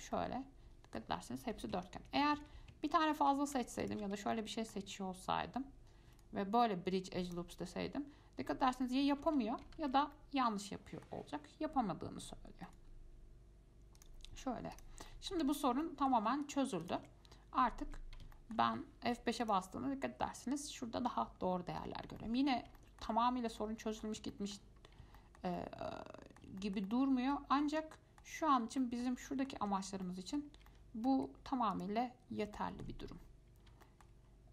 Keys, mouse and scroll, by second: 0.3-2.6 middle drag, 2.6 ctrl+z, 4.0 alt+click, 4.5-6.3 middle drag, 6.3-9.1 right drag, 9.1 middle click, 9.4 ctrl+z, 10.0 ctrl+z, 10.3-12.8 middle drag, 12.8-14.6 right drag, 14.6-15.3 scroll down 2, 14.9 click, 15.3 middle click, 15.6 Tab, 16.0 shift+middle click, 16.6 click, 17.0 click, 17.2 Tab, 17.8 scroll up 1, 18.0 Tab, 18.5-19.3 shift+middle drag, 19.3 F5, 19.6 click, 20.0-22.1 scroll up 1, 22.1 scroll up 1, 22.4-23.6 middle drag, 23.6 scroll down 1, 23.8-25.0 middle drag, 25.0-25.4 scroll up 2, 25.4-27.9 shift+middle drag, 27.9 scroll down 1, 27.9 middle click, 28.7 scroll down 2, 29.0 shift+middle click, 29.8 Tab, 30.2-31.4 middle drag, 31.4 Tab, 31.9 click, 32.5 scroll up 1, 32.7 shift+middle click, 33.4-33.9 scroll up 2, 34.0 shift+middle click, 34.3 scroll down 1.